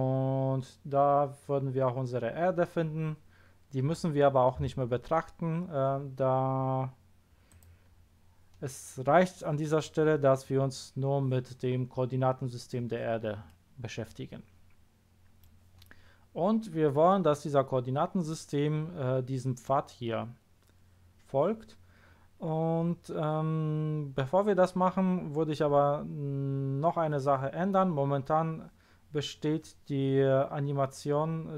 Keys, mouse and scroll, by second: 7.5 click, 10.3 scroll up 1, 11.8 scroll down 1, 13.4-13.8 middle drag.